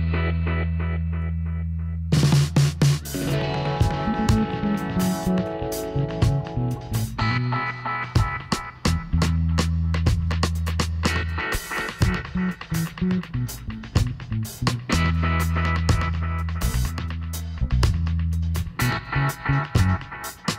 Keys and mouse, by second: 5.3 KP_1, 8.5 middle click, 10.0 shift+a, 13.9 r, 17.6-19.7 middle drag, 18.4 g.